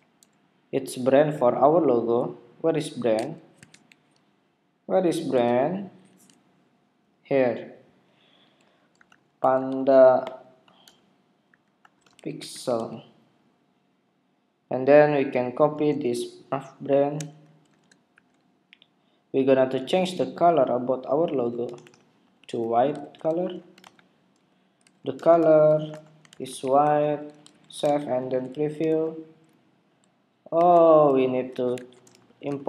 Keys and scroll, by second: 6.0 Escape, 17.7 super+c, 23.0 super+v, 27.7 super+s, 27.8 super+Tab, 29.0 super+r, 30.5 super+Tab.